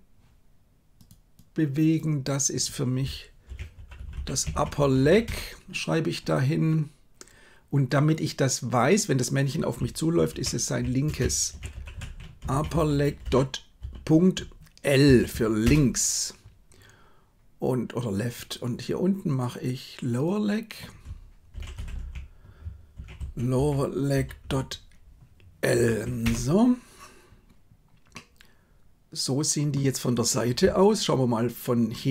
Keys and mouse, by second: 1.0-5.2 drag, 3.9 p, 8.0-15.6 drag, 11.9 p, 19.4-26.3 drag, 28.0-29.7 middle drag.